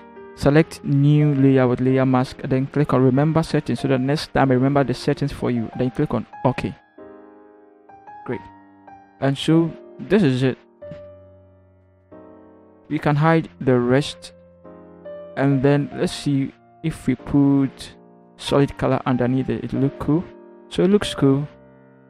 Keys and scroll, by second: 11.6 ctrl+0.